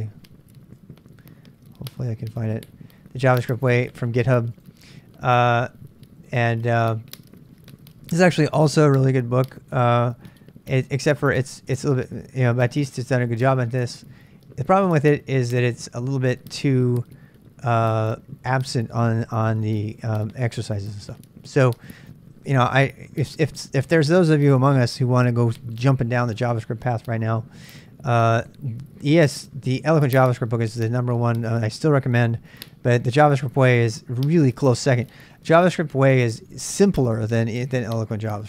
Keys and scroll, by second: 0.0-0.5 typing, 0.8 Return.